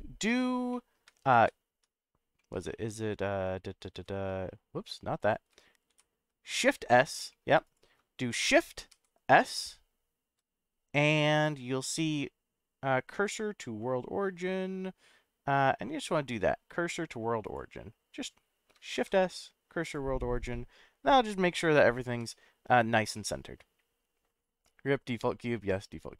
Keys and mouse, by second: 1.3 ctrl+a, 2.4 middle click, 3.9 ctrl+s, 5.9 shift+s, 19.0 shift+s, 20.5-21.5 middle drag, 22.1 KP_Decimal, 23.1-23.5 middle drag.